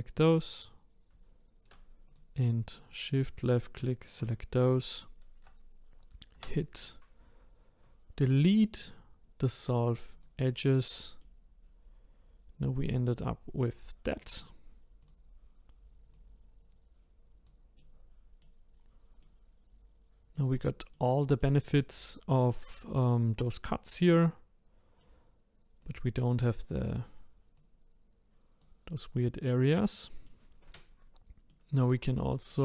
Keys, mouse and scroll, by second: 2.1 shift+click, 3.8 shift+click, 6.3 Delete, 10.7-11.2 scroll down 2, 11.2-12.3 middle drag, 12.4-14.2 middle drag, 14.2 click, 15.0 click, 16.1 click, 17.8 middle click, 18.7-19.2 scroll down 1, 19.2-23.0 middle drag, 23.4-25.8 middle drag, 25.8 click, 27.5 click, 28.9-30.8 middle drag, 30.8-31.5 scroll up 2, 31.5-32.6 middle drag.